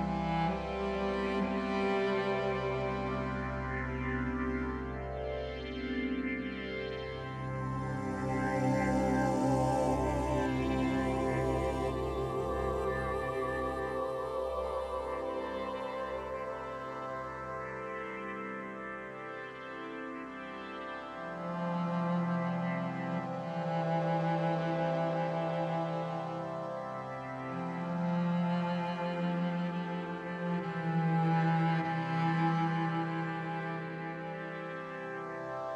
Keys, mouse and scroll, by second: 0.1 right click, 0.9-7.7 drag, 11.4-14.6 drag, 15.5 drag, 20.6-30.1 drag, 20.6 shift+a, 33.7-35.7 drag.